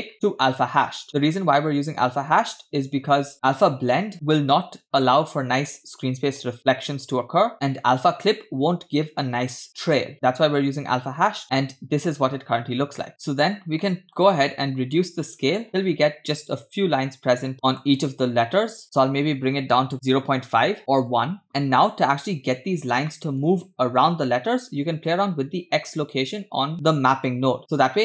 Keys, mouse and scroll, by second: 13.8 middle click, 14.9-17.9 drag, 18.8-20.3 shift+drag, 20.8 click, 20.8 scroll down 2, 21.5-21.9 shift+middle drag, 23.1 shift+middle click, 25.1-26.7 shift+drag, 26.7 middle click, 27.3-28.0 shift+drag.